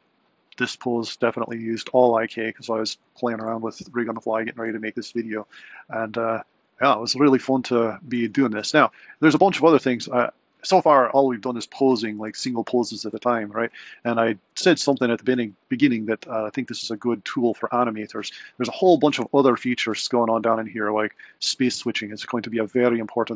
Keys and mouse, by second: 0.1 Right, 12.4 Right, 17.1 click.